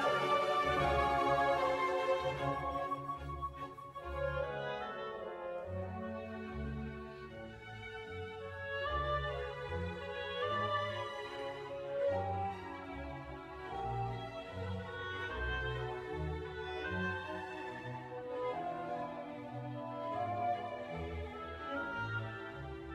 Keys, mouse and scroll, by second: 3.1 n, 6.2 click, 7.4 n, 8.9 click, 10.1-11.9 shift+middle drag, 11.9-13.1 scroll down 5, 13.1-14.0 shift+middle drag, 14.0-14.6 scroll down 3, 15.0-15.7 scroll up 1, 15.7-20.8 shift+middle drag, 20.8-22.3 scroll down 2, 22.3-22.9 shift+middle drag.